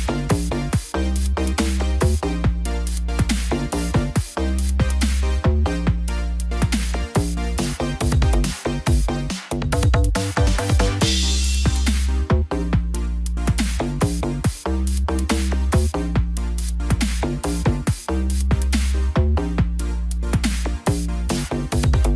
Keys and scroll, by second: 2.4 ctrl+d, 10.4 ctrl+alt+shift+e.